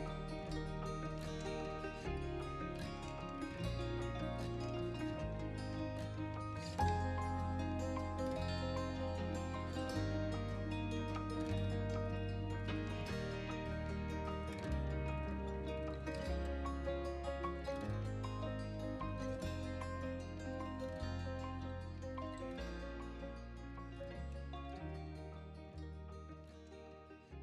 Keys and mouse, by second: 0.0-1.1 typing, 0.8 click, 2.0 click, 2.1 middle click, 3.2 right click, 3.4 middle click, 4.0 KP_1, 4.2 KP_3, 4.7-5.2 middle drag, 5.5 middle click, 5.9 middle drag, 6.6-7.0 middle drag, 7.2 shift+d, 7.4 shift+z, 8.0 click, 8.2 z, 9.2 s, 9.6-10.3 middle drag, 10.6 shift+z, 11.0 middle click, 11.4 r, 11.6 z, 11.9 middle click, 12.2 shift+z, 13.0 middle click, 13.7 middle click, 14.4 middle click, 14.7 r, 14.9 x, 15.4-15.9 middle drag, 16.1 KP_1, 16.4 KP_3, 16.9 KP_1, 17.4-18.3 middle drag, 18.4 KP_1, 19.2 middle click, 19.4 KP_1, 21.7 g, 21.8 x, 23.9 s, 24.5 click, 24.7 s, 24.9 x, 25.3 middle click, 26.0 s, 26.0 x, 27.0 right click, 27.2-27.4 middle drag.